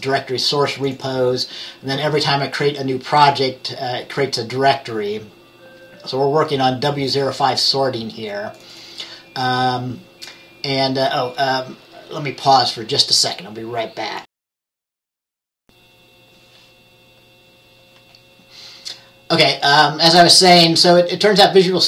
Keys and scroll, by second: 15.6 q.